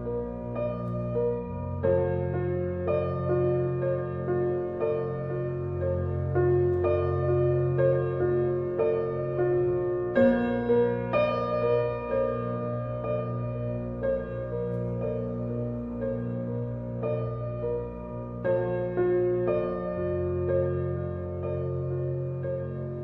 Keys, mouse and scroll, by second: 0.0-0.4 middle drag, 0.4-0.7 scroll up 2, 0.7-4.2 shift+middle drag, 6.6-11.0 shift+drag, 11.0-15.2 shift+middle drag, 15.2 click, 16.8-17.6 middle drag, 17.6 scroll down 2, 17.9-18.7 middle drag, 18.7-19.1 scroll down 1, 19.1-20.4 middle drag, 20.4 alt+h, 21.1 click, 21.5-23.0 middle drag.